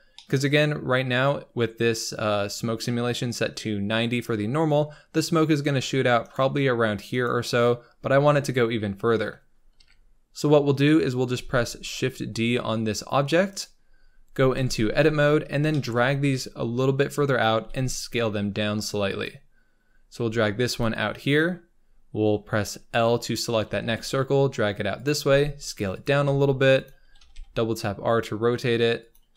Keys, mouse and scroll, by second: 0.1-2.1 middle drag, 2.1-2.8 scroll up 4, 4.7-6.2 scroll down 5, 6.2-9.7 shift+right drag, 9.7 KP_7, 10.5-10.9 scroll up 5, 11.3 shift+d, 13.8-14.5 scroll up 4, 14.5 Tab, 15.3 scroll up 1, 15.5 scroll down 1, 15.6 shift+middle click, 16.1 g, 17.5 s, 19.7-20.1 scroll down 1, 20.1 g, 21.3 click, 21.7-22.9 scroll up 2, 22.9 l, 23.7 g, 25.2 s, 26.2 g, 27.1 r.